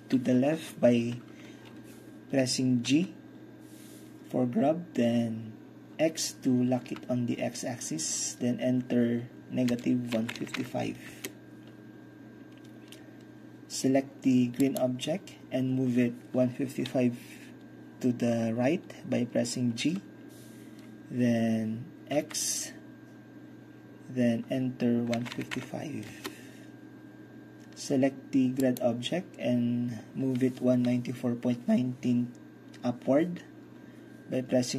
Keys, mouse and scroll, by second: 2.9 g, 6.9 x, 9.8 -, 10.2 KP_1, 10.4 KP_5, 10.6 KP_5, 11.2 Return, 14.7-18.6 drag, 19.9 g, 22.2 x, 25.2 KP_1, 25.4 KP_5, 25.6 KP_5, 26.2 Return, 28.7-30.6 drag.